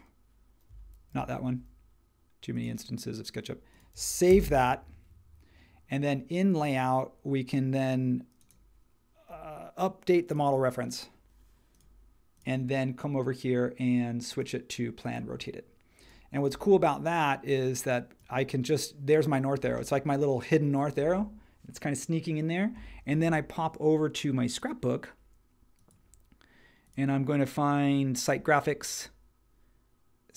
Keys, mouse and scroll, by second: 1.1 super+h, 4.3 super+s.